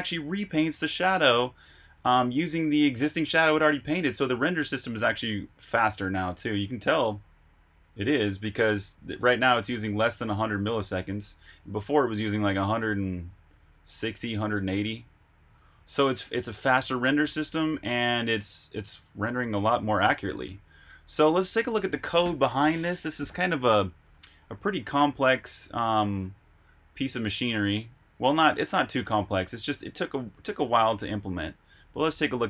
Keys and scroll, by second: 0.0-1.2 typing, 10.8-18.2 typing, 20.1 typing, 23.6-28.9 typing, 29.3 super+q, 30.1 super+Tab.